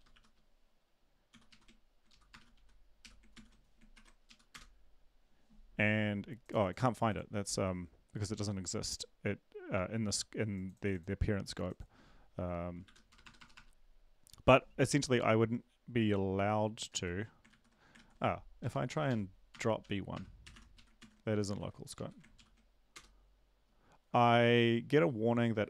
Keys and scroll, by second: 0.0-0.6 typing, 2.1-5.2 typing, 3.9 ctrl+`, 4.2 Up, 8.3 ctrl+`, 12.8 shift+Home, 13.1 BackSpace, 13.2 BackSpace, 13.4 BackSpace, 13.5 BackSpace, 16.9 ctrl+z, 17.5 ctrl+z, 17.9 ctrl+z, 19.5 Right, 19.5 Left, 19.5-21.0 typing, 21.5 ctrl+`, 21.9 Up, 22.4 ctrl+l, 22.9 Return.